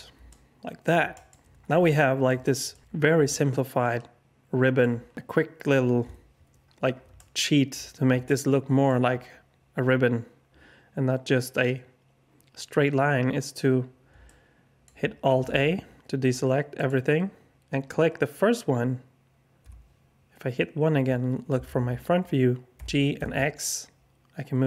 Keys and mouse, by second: 0.3 alt+click, 1.1 alt+shift+click, 1.8 alt+click, 2.4 alt+shift+click, 2.7 middle click, 2.8 alt+click, 3.2 middle click, 3.3-4.8 alt+drag, 6.0 KP_1, 7.1 alt+shift+click, 8.2 alt+shift+click, 14.2 alt+click, 15.3 alt+a, 19.6 KP_1, 22.7 g.